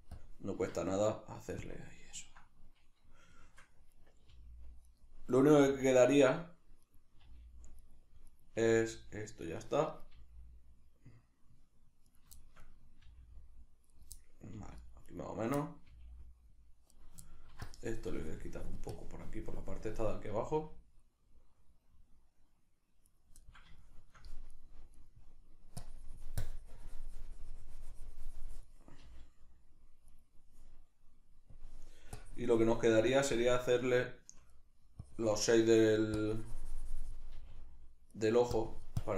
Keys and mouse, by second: 0.1-2.1 drag, 0.6 Tab, 2.1-4.0 ctrl+middle drag, 4.0 right click, 4.3 g, 5.3 right click, 5.5 g, 6.1 right click, 6.8 right click, 7.2 g, 8.3 right click, 8.6 g, 9.9 right click, 10.1 g, 12.2 right click, 12.4-14.0 shift+middle drag, 13.1 g, 14.0 right click, 14.2 middle click, 14.6 g, 15.1 right click, 15.6-17.1 middle drag, 15.9 g, 17.1 right click, 17.3 ctrl+middle click, 17.7-23.2 drag, 20.3 g, 23.2 right click, 23.5-24.5 middle drag, 24.5 right click, 25.0 right click, 25.8-30.2 drag, 29.1 g, 30.2 right click, 31.5-34.6 drag, 34.6 right click, 35.0 click, 35.6 shift+middle click, 36.2-38.2 drag, 37.3 g, 38.2 right click, 38.6-39.1 drag.